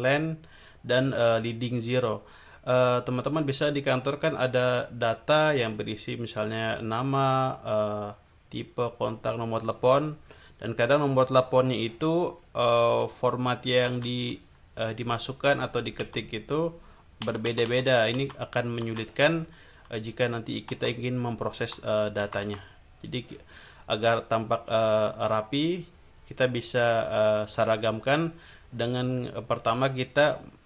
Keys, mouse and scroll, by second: 0.0 click, 9.6 click, 11.8 click, 13.8 Down, 16.0 Down, 17.2 Down, 18.8 Down, 20.7 Down, 21.6 Up.